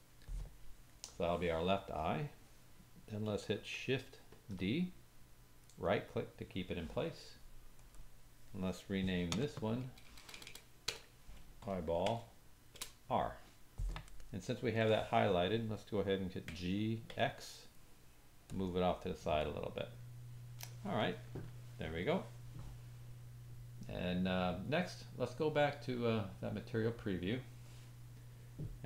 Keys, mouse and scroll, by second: 3.5-7.8 shift+drag, 4.3 shift+d, 7.8 middle click, 7.9-11.7 drag, 10.2 BackSpace, 10.3 BackSpace, 12.2-18.6 drag, 16.5 g, 18.6-21.0 middle drag, 24.5-26.8 middle drag, 26.8 click, 26.8 middle click.